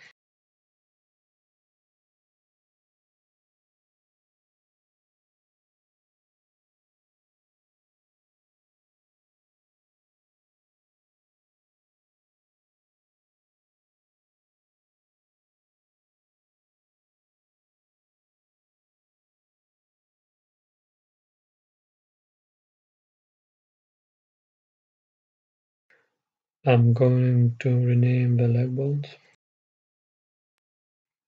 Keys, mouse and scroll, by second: 0.2 ctrl+p, 2.7 Tab, 4.3 ctrl+p, 11.5-13.4 drag, 14.4-16.4 drag, 18.1-21.3 right drag, 19.3-21.3 drag, 23.0-31.2 middle drag.